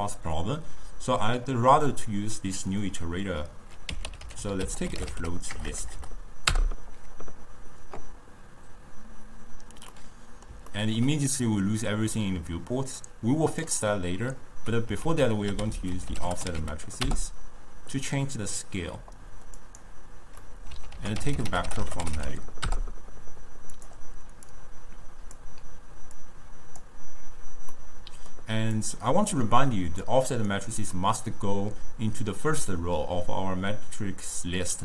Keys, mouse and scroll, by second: 2.7-5.7 drag, 5.7 BackSpace, 5.8 BackSpace, 10.1-13.1 middle drag, 13.1-15.1 drag, 15.1 ctrl+a, 15.8 f, 20.0 click, 20.5 middle click, 21.0 ctrl+a, 24.6 drag, 26.2 click, 27.8-28.8 middle drag, 28.8 click, 31.0-34.1 middle drag.